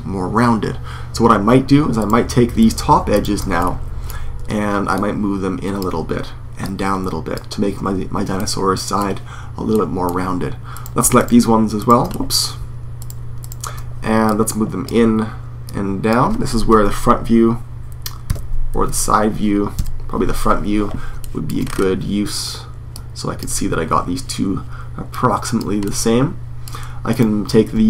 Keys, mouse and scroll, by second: 1.7-3.3 right drag, 3.3-4.4 middle drag, 4.4 right click, 4.7-8.1 drag, 4.7 middle click, 8.1-10.5 middle drag, 10.5 right click, 10.7-14.0 middle drag, 15.1-17.1 drag, 16.4 KP_1, 18.0 KP_5, 18.5 KP_3, 19.5 KP_1, 22.7 click, 22.8 click, 24.5 middle click, 24.8-26.7 drag, 26.7-27.8 middle drag.